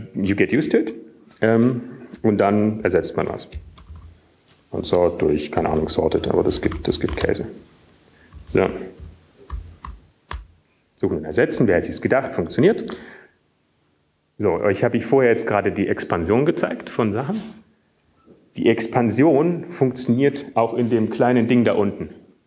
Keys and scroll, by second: 0.1 alt+%, 6.1-8.1 typing, 9.1-9.7 typing, 10.8 typing, 11.9 typing, 14.4-15.9 typing.